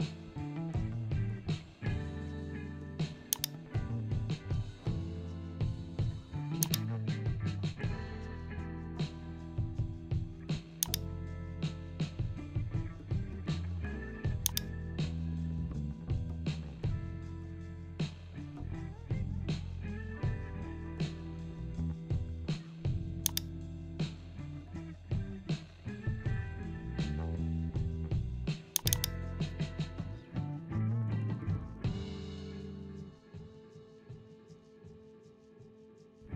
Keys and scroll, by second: 31.9 ctrl+j.